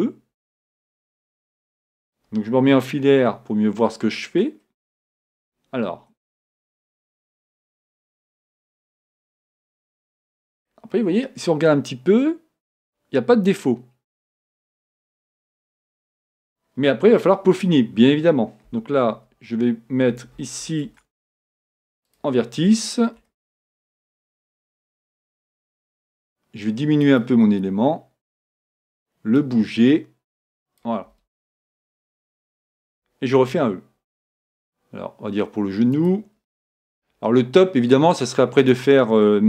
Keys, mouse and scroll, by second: 3.2 z, 4.1-6.3 middle drag, 9.7-11.0 scroll down 2, 9.8 middle click, 11.0-12.9 middle drag, 15.9-18.5 middle drag, 18.7 a, 19.2 b, 20.9 ctrl+Tab, 23.2 b, 25.7 s, 29.4-31.1 drag, 31.4 middle click, 31.4-32.2 scroll down 1, 32.2-33.9 middle drag, 33.5 e, 36.9 e, 38.8-39.4 drag.